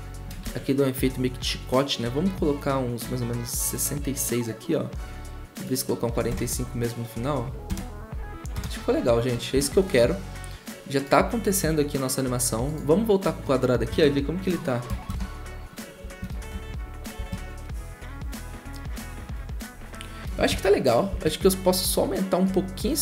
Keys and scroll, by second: 6.3 0, 7.7-8.5 typing, 13.9 0, 15.1 0, 16.5 0, 19.2 0, 20.5 0.